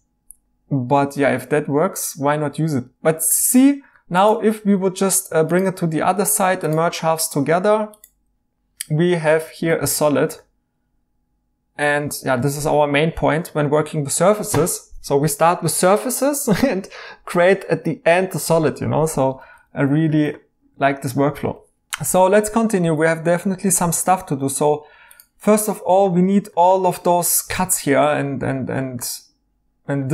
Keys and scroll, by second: 3.3 e, 4.6 alt+x, 9.8 e, 19.4 ctrl+z, 20.7 e, 23.8 typing.